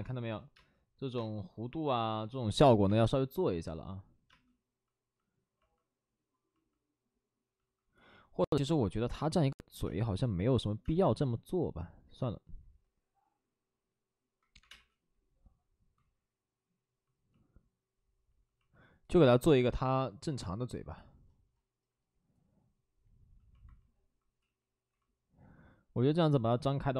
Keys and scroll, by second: 0.5 space, 5.5 space, 8.8 space, 9.8 space, 10.8 space, 14.5 5, 14.6 space, 15.9 ctrl+z, 24.3 ctrl+z.